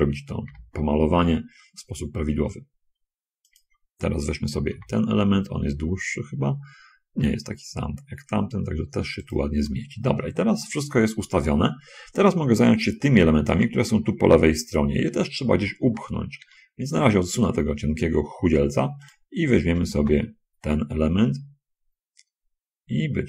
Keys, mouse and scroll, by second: 0.8 r, 3.8 ctrl+click, 5.0 g, 9.6 click, 10.4 scroll up 2, 10.6-11.8 shift+drag, 16.7 l, 17.3 g, 19.4 click, 20.1 l, 20.4 g.